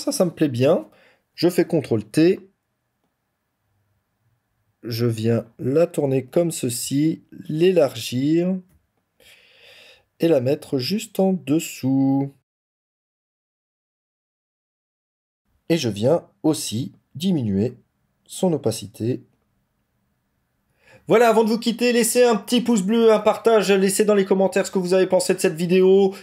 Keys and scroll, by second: 1.4 ctrl+t.